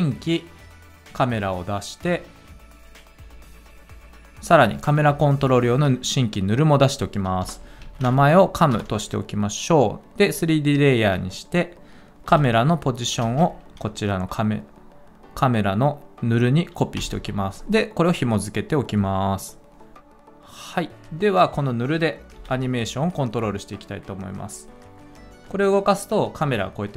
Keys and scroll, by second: 7.4 Return, 7.6-8.6 typing, 8.7 Return, 12.3 p, 13.2 ctrl+c, 17.0 ctrl+v, 22.4 p.